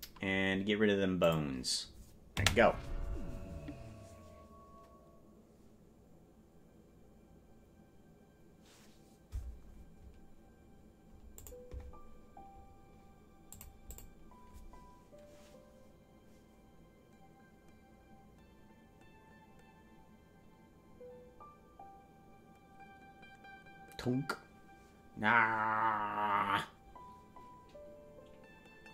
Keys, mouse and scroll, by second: 1.3 click, 2.3 space, 14.0 click.